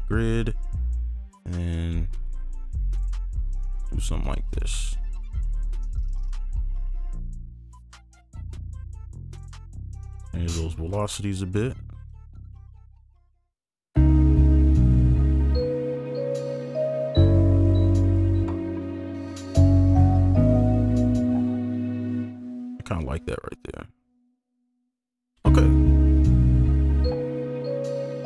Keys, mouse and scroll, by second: 4.0 ctrl+click, 5.0 shift+click, 6.0 right click, 6.0 shift+click, 8.8 right click, 10.1 ctrl+click, 10.5-11.1 alt+scroll up 6, 11.6 ctrl+click, 12.2 ctrl+click, 12.5-12.9 alt+scroll down 4, 12.9 right click, 13.8 alt+scroll up 1, 14.0 space, 14.9 right click, 15.0 ctrl+a, 15.3 ctrl+a, 15.3-16.0 alt+scroll up 3, 16.1-16.7 alt+scroll down 1, 18.6 ctrl+a, 19.4 shift+click, 22.0 shift+right click, 22.7 space, 22.9 right click, 24.9 ctrl+a, 25.2 alt+scroll down 1, 25.5 space, 26.7 ctrl+a.